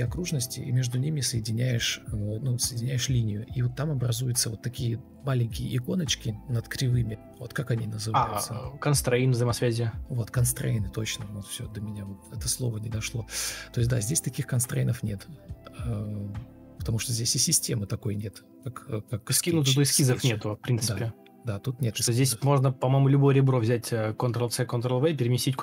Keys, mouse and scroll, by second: 1.1 ctrl+click, 1.1 e, 1.8 Escape, 3.1 ctrl+z, 3.5 ctrl+click, 4.1 ctrl+click, 5.7 Escape, 6.2 Delete, 12.6 Delete, 12.8 ctrl+space, 14.1 F4, 17.0 F4, 17.5 ctrl+space, 18.2 ctrl+d, 19.5 ctrl+z, 19.5 ctrl+e, 20.4 shift+d, 24.3 Delete.